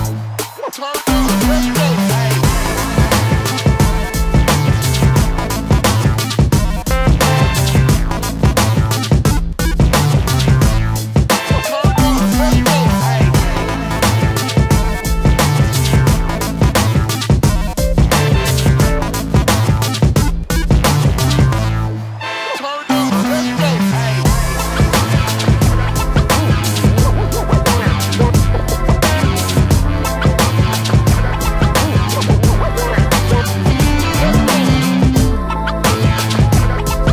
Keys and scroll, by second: 1.8 shift+space, 6.2 space, 7.8 shift+e, 10.0 space, 10.5 space, 10.8 space, 18.5 space, 19.4 s, 19.8 space, 20.5 s, 26.3 shift+space, 28.0 shift+j, 33.8 space.